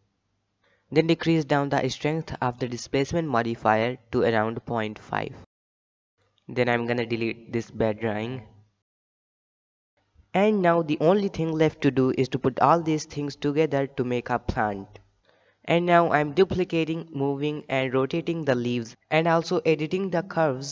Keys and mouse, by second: 0.7-1.1 middle drag, 1.7-5.5 shift+drag, 6.0 middle click, 6.3 shift+middle click, 7.0 n, 7.7 click, 8.8 click, 9.7 n, 10.4 KP_7, 10.8 b, 11.4 g, 13.3 alt+a, 13.3 b, 13.8 shift+middle drag, 14.2 KP_3, 14.4 shift+middle drag, 14.7 shift+d, 16.2 r, 17.2 g, 17.8 KP_1, 18.1 g, 18.9 middle drag, 19.2 g, 19.7 KP_3, 20.1 click, 20.2 shift+middle click, 20.4 Tab.